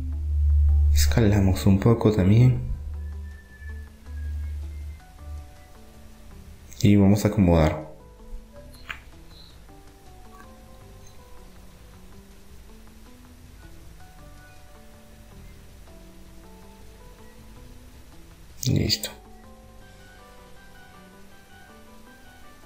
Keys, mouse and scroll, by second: 2.3 s, 6.3-8.3 drag, 8.3-9.9 middle drag, 9.3 KP_1, 10.3-12.0 middle drag, 12.0 s, 15.6 Tab, 16.4-18.4 drag, 18.6 click, 20.3 middle click.